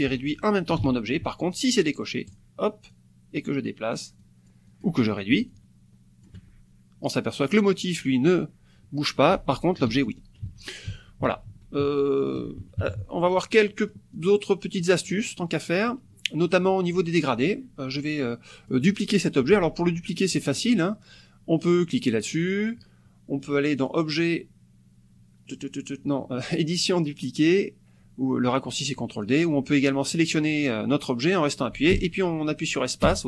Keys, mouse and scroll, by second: 0.8 ctrl+z, 2.3 click, 2.9 click, 3.7-5.0 drag, 5.5 ctrl+shift+click, 9.9 ctrl+z, 12.6 ctrl+KP_Subtract, 13.7 click, 14.2 click, 14.8 click, 15.5 click, 16.5 click, 18.0 click, 23.8 click, 29.2 click, 30.3-33.2 drag, 31.9 space, 33.1 space.